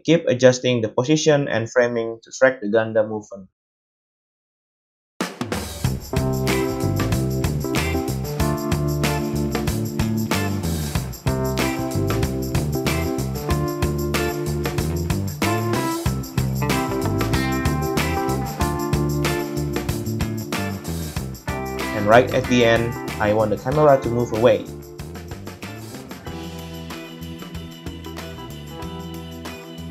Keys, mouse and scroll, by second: 1.2 space, 3.8 r, 6.5-10.9 middle drag, 7.3-10.2 typing, 10.9-16.8 drag, 16.3 r, 16.8-18.5 middle drag, 17.2 r, 18.0 i, 18.5-21.6 drag, 19.9 r, 21.6-23.2 middle drag, 21.9 r, 23.5 g, 25.1-29.0 middle drag, 25.1 r, 26.5 i, 28.1 x, 29.0-29.9 drag.